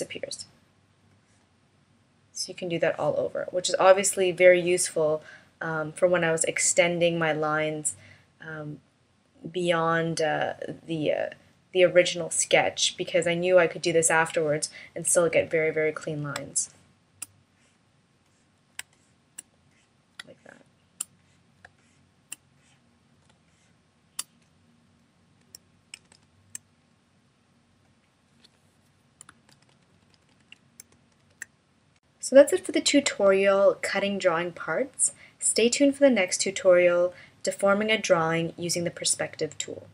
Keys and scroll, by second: 15.9 space, 18.3 space, 19.7 space, 21.1 space, 22.7 space, 25.9 shift+-, 30.6 shift+m.